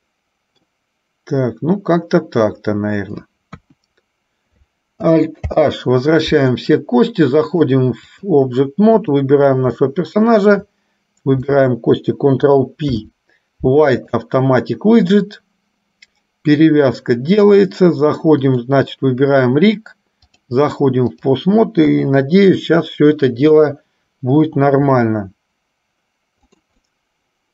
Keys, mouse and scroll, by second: 3.6 KP_1, 5.7 alt+h, 7.6-8.7 drag, 9.3 click, 10.6 shift+click, 18.5 click, 20.5-21.6 drag, 22.1 KP_3, 23.7 click, 25.1 r, 27.1-27.5 middle drag.